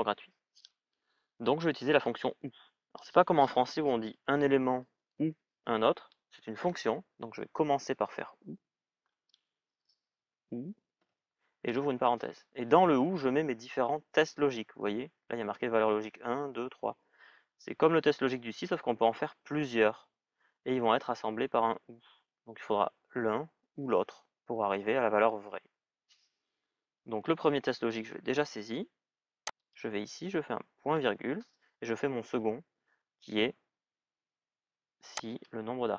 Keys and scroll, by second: 9.8 shift+o, 10.8 shift+u.